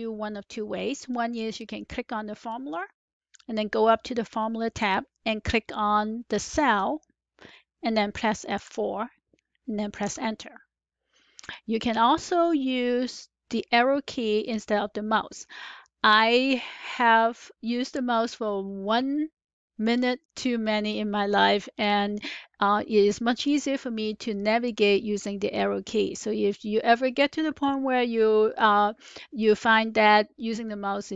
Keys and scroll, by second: 8.5 F4, 10.0 Return.